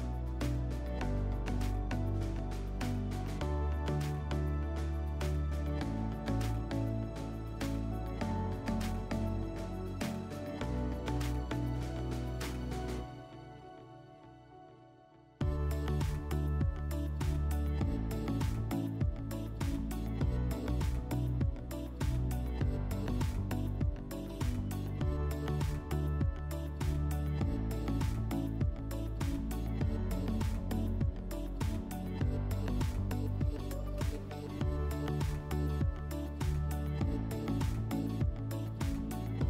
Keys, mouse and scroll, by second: 0.6-2.2 drag, 4.4 click, 9.9 click, 11.8 click, 12.0 click, 12.7-13.3 typing, 15.2 click, 18.8 click, 22.2 click, 23.4 right click, 25.0 click, 25.1 click, 25.6-26.6 typing, 26.7 Return, 29.3 click, 30.3 click, 30.4 click, 30.9-33.6 typing, 33.5 click, 34.8 click, 35.5-36.2 typing, 36.4 Return, 38.3 click, 39.3 click.